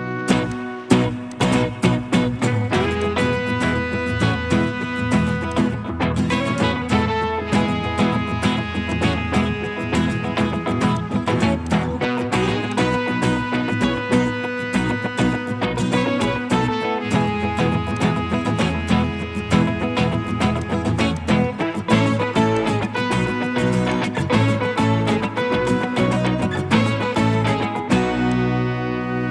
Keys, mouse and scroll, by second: 14.0 middle click, 25.4 Escape, 25.6 Escape.